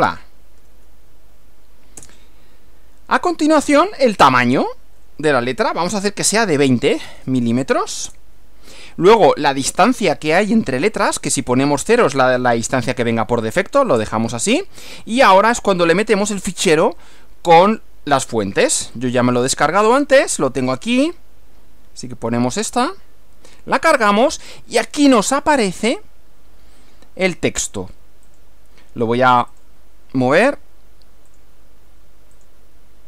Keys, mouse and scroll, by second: 0.0-0.6 typing, 2.0 Return, 5.0-7.1 typing, 8.1 Return, 14.0 Return, 16.8 click, 19.0 click, 20.8 click, 22.6 click, 28.4 click, 29.5 click, 31.3 click, 32.4 click.